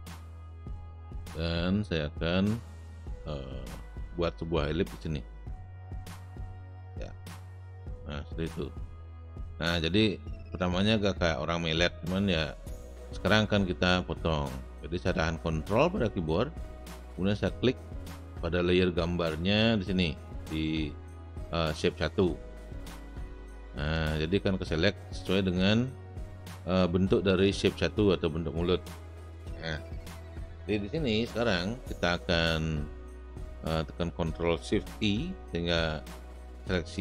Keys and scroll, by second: 36.8 ctrl+shift+i.